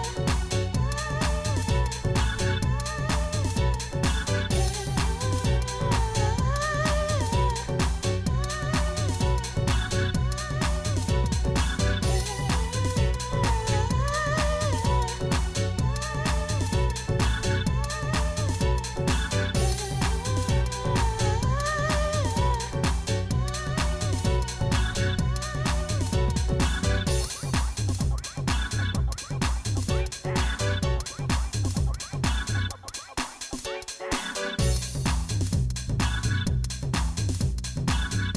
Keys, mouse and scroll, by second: 0.2 Tab, 5.1 click, 5.7 click, 12.7 click, 15.6 click, 23.7-25.2 drag, 33.6 click, 35.6 click, 38.2 click.